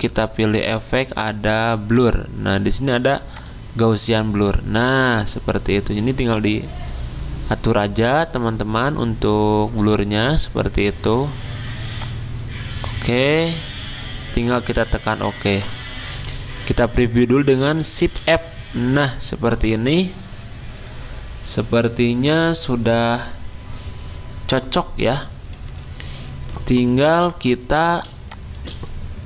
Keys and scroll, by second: 18.0 f, 25.6 Escape.